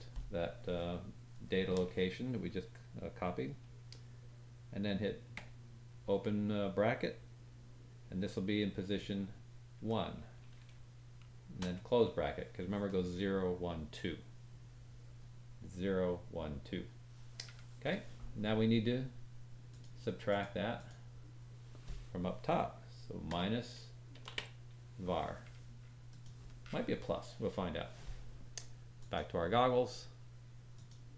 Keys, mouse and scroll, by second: 29.1-30.7 drag.